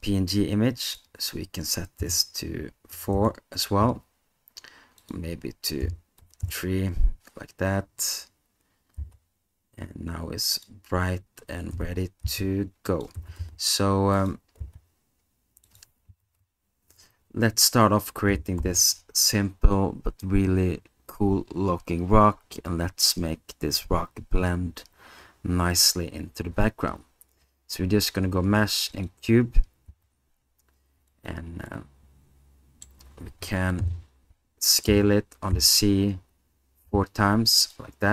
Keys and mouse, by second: 0.9-3.1 drag, 5.1-6.4 drag, 9.0 s, 11.7 g, 12.2 x, 13.2 g, 13.4 y, 14.6 s, 29.9 s, 31.1 click, 31.7-32.8 middle drag, 34.9 s, 35.6 z, 36.9 4, 37.6 click.